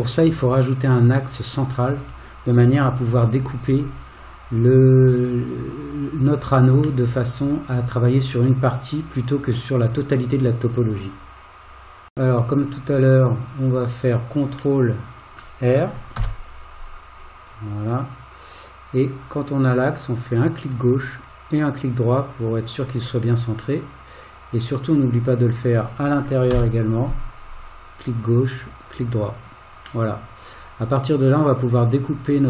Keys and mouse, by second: 7.1-10.7 middle drag, 14.8 middle click, 16.2 ctrl+r, 23.9-25.1 middle drag, 26.5 ctrl+r, 30.1-32.4 middle drag.